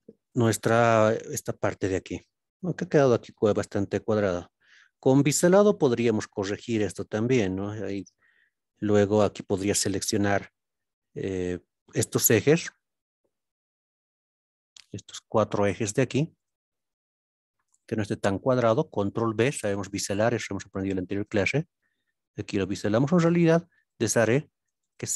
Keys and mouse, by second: 0.0-1.6 middle drag, 4.1-5.0 middle drag, 12.5 click, 14.9-15.6 middle drag, 16.7-17.1 middle drag, 18.1 shift+click, 19.2 ctrl+b, 23.7 right click, 24.8 shift+click.